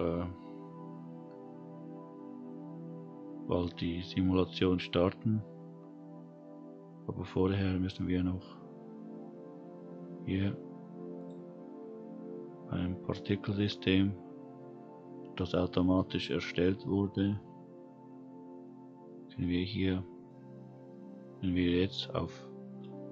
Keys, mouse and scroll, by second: 3.0-4.1 scroll down 1, 11.1 click, 18.4-19.2 scroll down 3, 19.2-20.1 scroll down 2.